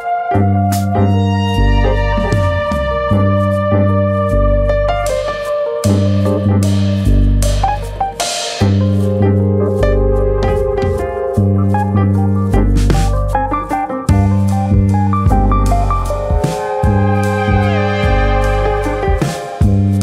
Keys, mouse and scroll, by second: 1.5 click, 3.1 click, 5.8 click, 7.0 ctrl+z, 7.4 right click, 9.1 click, 9.4 right click, 11.0 click, 12.7 click, 13.9 click, 14.6 click, 16.2 click, 16.2 middle click, 16.9-17.5 scroll up 3, 17.1 middle click, 17.5 shift+middle click, 18.0 click, 18.6 click, 19.3 middle click, 19.8 middle click, 19.9 shift+middle click.